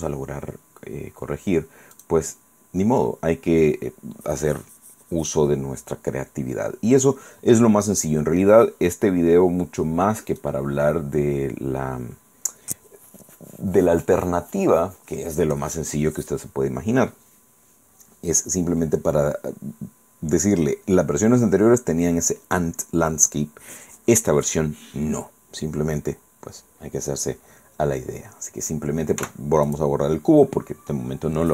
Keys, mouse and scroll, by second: 2.0 click, 7.0-7.3 scroll up 1, 7.4 scroll down 1, 10.4 middle click, 29.2 x, 29.7 click.